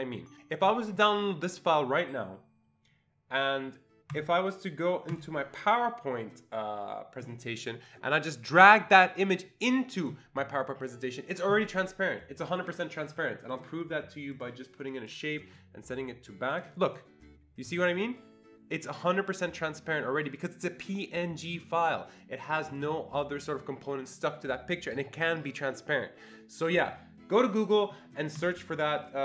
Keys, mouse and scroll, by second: 1.5 click, 4.1 click, 5.1 click, 7.2 click, 8.7-12.6 drag, 13.0 click, 13.5 click, 14.3 click, 14.9 click, 15.3 right click, 16.5 click, 17.0-25.4 drag, 27.7 click, 28.4 click, 29.0 click.